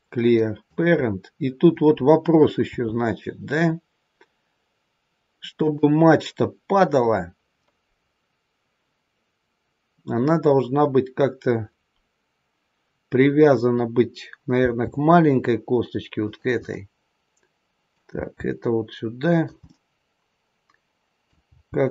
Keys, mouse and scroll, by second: 2.6 s, 14.6 g, 16.7 middle click, 18.1 g, 19.6 middle click, 21.4 g.